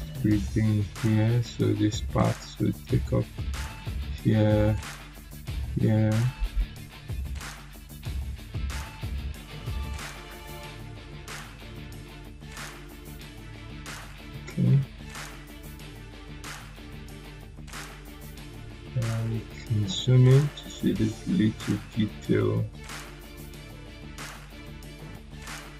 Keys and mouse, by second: 3.7 click, 12.9 click, 15.6 click, 18.3 click, 18.3-19.5 drag.